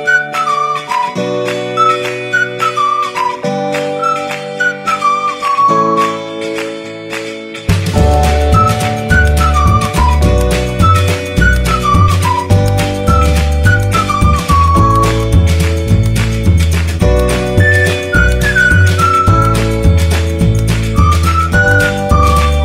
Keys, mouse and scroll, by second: 3.3 Return, 4.5-5.9 alt+drag, 5.9 alt+shift+right click, 7.3 click, 9.3 shift+o, 9.8 shift+f, 12.0 click, 18.5 t, 19.6 click, 21.2 shift+w, 21.6 shift+a, 22.1 shift+t.